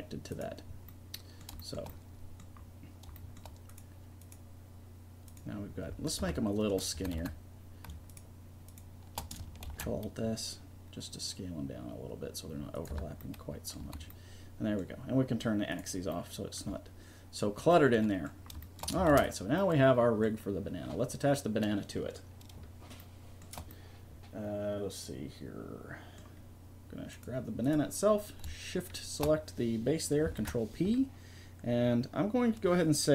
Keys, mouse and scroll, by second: 0.7-1.7 middle drag, 3.7 right click, 4.4-5.8 right drag, 6.2 Tab, 6.9 a, 7.2 a, 9.6 ctrl+alt+s, 12.9 Tab, 13.8 a, 16.1-17.2 middle drag, 19.1 ctrl+s, 23.9-27.1 drag, 27.1 right click, 28.4-30.4 right drag, 30.4 ctrl+p.